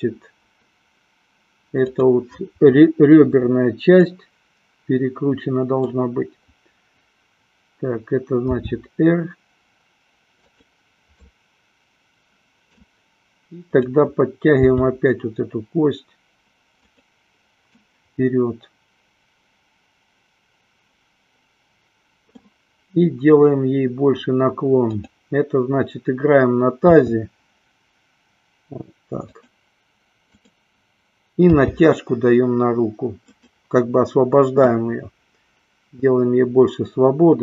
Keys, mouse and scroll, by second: 1.8-2.8 drag, 4.2-6.3 middle drag, 8.4 r, 10.8 click, 11.4-12.9 middle drag, 13.9-14.9 drag, 15.2 g, 18.1-22.7 middle drag, 24.9 click, 26.9 r, 30.4-31.4 drag, 31.8 g, 33.7 click.